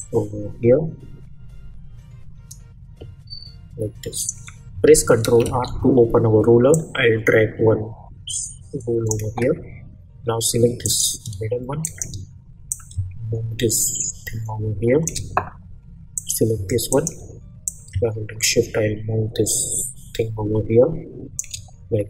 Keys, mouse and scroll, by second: 5.4 ctrl+r, 6.7-9.2 drag, 11.8 shift+click, 12.7-16.1 drag, 16.9 shift+click, 17.6-21.4 drag.